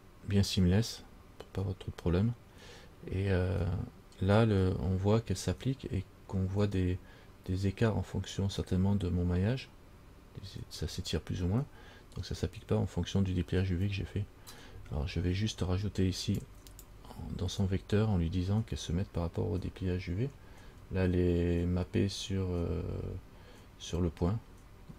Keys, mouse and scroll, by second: 1.5 scroll down 1, 5.1 scroll up 2, 16.6 click.